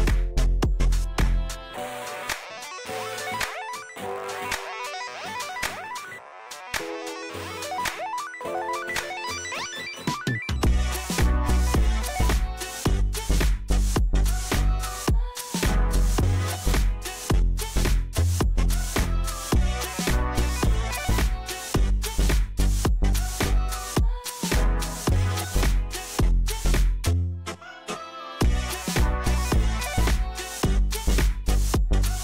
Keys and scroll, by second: 2.7 shift+z, 3.5 Tab, 4.5 shift+d, 5.0 Tab, 5.6 KP_7, 6.3 KP_1, 7.3 shift+z, 8.5 Delete, 12.1 KP_7, 16.7 s, 20.6 j, 22.0 Delete, 26.4 e, 29.8 shift+s, 31.0 Tab.